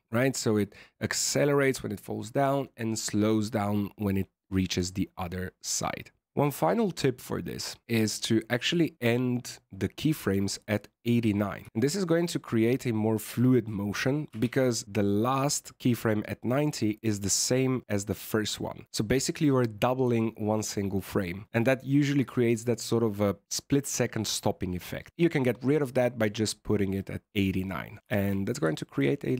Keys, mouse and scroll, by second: 10.6 click, 11.6 a, 11.7-12.1 scroll up 4, 12.1-13.1 scroll down 2, 14.3 alt+a, 16.7 click, 25.7 scroll down 2, 26.0 shift+middle click, 28.0 alt+a, 28.7 shift+middle click.